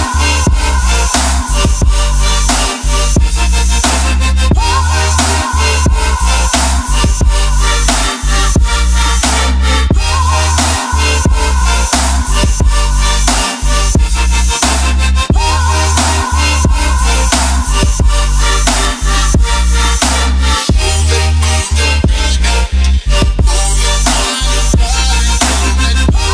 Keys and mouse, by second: 0.1 middle click, 5.0 ctrl+middle click, 5.5 middle click, 6.7 click, 7.0-10.5 drag, 13.6-15.1 drag, 15.3 click, 16.1-19.4 drag, 25.4 click.